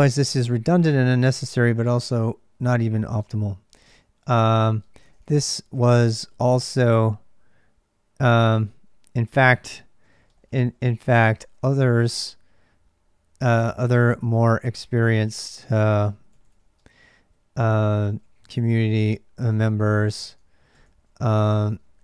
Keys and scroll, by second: 0.0-22.0 typing.